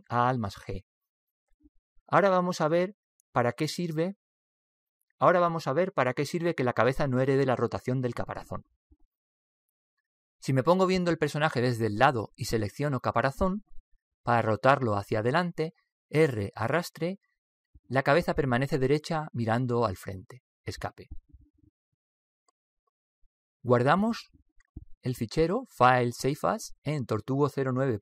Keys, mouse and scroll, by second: 1.3 alt+g, 4.9-13.6 middle drag, 13.6 right click, 15.8 r, 25.4-26.8 middle drag, 26.8 click.